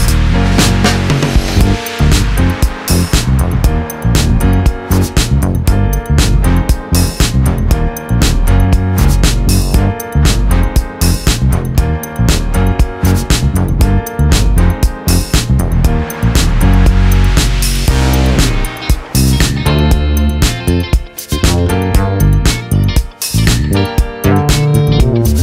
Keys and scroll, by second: 5.6 ctrl+-.